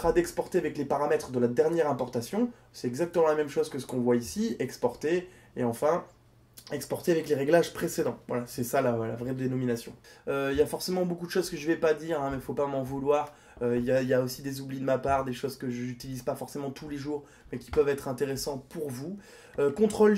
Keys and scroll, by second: 18.7 ctrl+g.